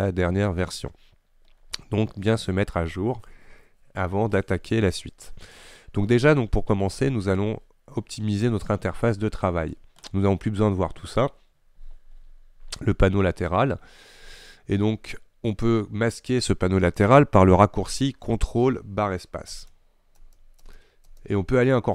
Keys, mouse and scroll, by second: 19.6 ctrl+space, 20.2 ctrl+space, 20.7 ctrl+space, 21.1 ctrl+space.